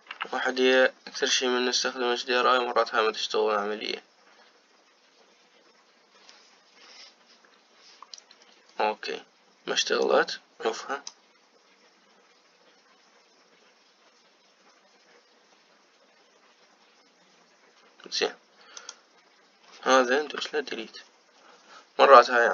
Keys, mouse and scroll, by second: 11.0 click, 19.7 click, 21.1 Delete.